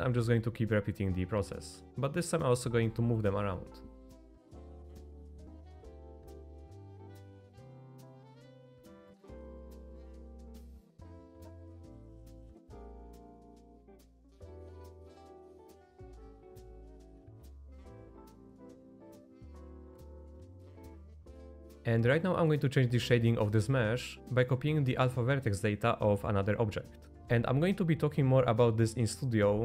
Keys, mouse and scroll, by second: 1.3 middle click, 1.7 shift+d, 3.5 middle click, 4.6-10.7 typing, 4.9 middle click, 5.4 middle click, 5.9 shift+middle click, 6.0 middle click, 6.3 middle click, 6.7 middle click, 7.7 middle click, 8.4 middle click, 9.0 middle click, 9.6 middle click, 10.4 middle click, 11.6 middle click, 11.8 middle click, 12.0 shift+middle click, 12.2 middle click, 12.6 middle click, 13.1 middle click, 13.4 middle click, 13.8 shift+d, 14.1 s, 14.5 middle click, 14.5 r, 15.3 Tab, 15.5 middle click, 15.7 z, 15.8 middle drag, 16.2-16.9 middle drag, 16.2 z, 17.0 Tab, 17.3 middle click, 17.3-19.3 typing, 17.9 middle click, 19.0 middle click, 19.2 middle click, 19.6 Tab, 19.7 click, 19.8-20.2 middle drag, 20.4 middle drag, 20.7 middle click, 21.0 shift+middle click, 22.6-24.2 drag, 25.4 middle click, 27.2 Escape, 27.2 shift+a.